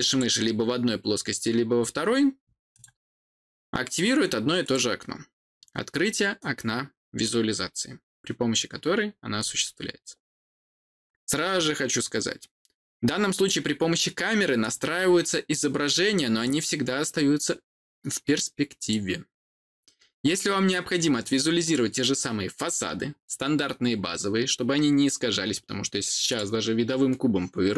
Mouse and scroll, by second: 0.0 click, 2.6 click, 4.5 click, 6.3 click, 13.2 click, 14.5 click, 16.3-18.8 drag, 21.5 click, 26.2 click.